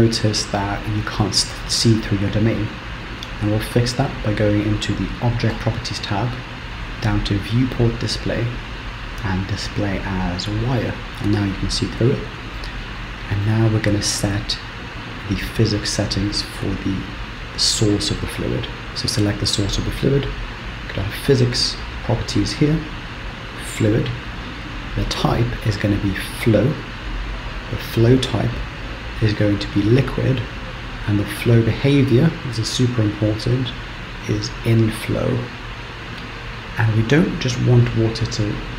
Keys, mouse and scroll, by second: 0.9 middle click, 5.0 click, 9.2 click, 12.5 middle click, 15.1 click, 20.7 click, 21.9 click, 23.2 click, 24.3 click, 27.4 click, 31.3 click, 34.8-36.6 scroll down 8, 36.6-38.7 scroll down 3.